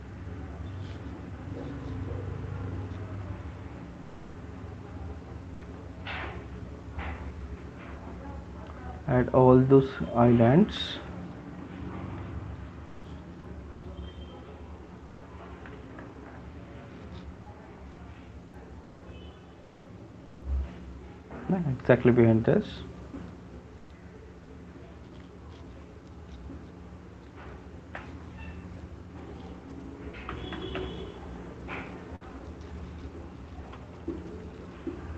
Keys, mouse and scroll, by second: 0.1 click, 0.6 click, 0.8 click, 2.4 click, 2.4 right click, 2.6 click, 2.8 click, 3.6 click, 3.8 alt+click, 4.5 alt+click, 4.9 alt+click, 5.7 alt+click, 6.3 click, 6.6 alt+click, 7.0 click, 8.1 click, 8.7 alt+click, 9.3 click, 9.5 click, 9.9 click, 10.5 click, 11.2 ], 12.9 alt+click, 14.9 alt+click, 15.7-16.7 typing, 17.4 click, 19.1 click, 20.4 click, 21.4 click, 22.8 click, 24.5 click, 25.0 click, 26.5 right click, 27.5 click, 27.9 alt+click, 28.2 alt+click, 28.4 click, 29.1 click, 30.5 typing, 32.0-32.6 [, 33.8 ], 34.0 ], 34.2 ], 34.9 click.